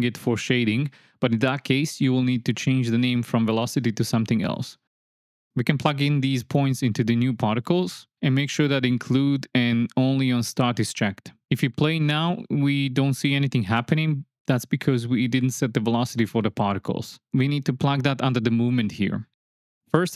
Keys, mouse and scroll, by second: 0.7 click, 2.2 click, 2.4-3.7 drag, 4.2 click, 6.2 shift+click, 7.2-8.2 drag, 10.1 shift+Left, 10.6 space, 11.6 space, 14.7 click, 15.6 click, 17.3 click, 18.8 click, 19.7-20.1 drag.